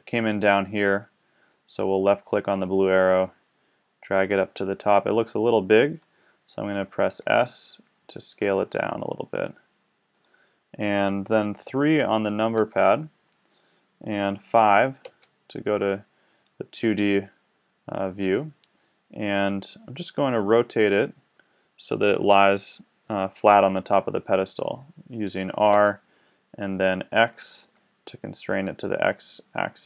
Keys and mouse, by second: 1.9-5.1 drag, 7.0 s, 10.3-12.6 drag, 12.6 KP_3, 15.0 KP_5, 25.7 r.